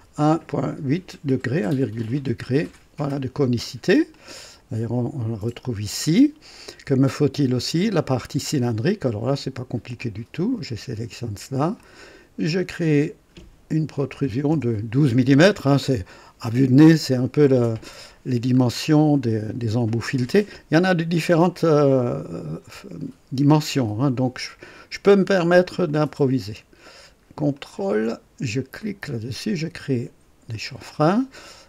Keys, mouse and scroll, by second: 0.0 KP_1, 0.3 KP_Decimal, 0.8 KP_8, 2.2 KP_Enter, 2.2-2.8 typing, 4.1 click, 6.5 click, 8.6 click, 9.7-10.4 typing, 9.9 click, 11.8 click, 14.0 KP_1, 14.2 KP_2, 14.5 KP_Enter, 15.8-17.6 drag, 16.8 typing, 17.9 scroll up 1, 25.9 click, 27.6 ctrl+click, 28.8 click, 30.5 click, 31.4-31.6 drag.